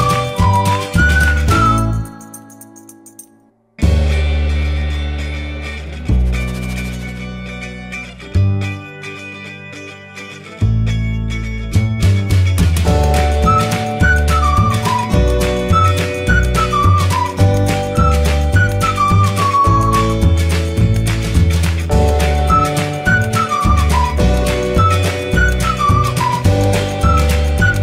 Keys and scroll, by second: 20.5 y.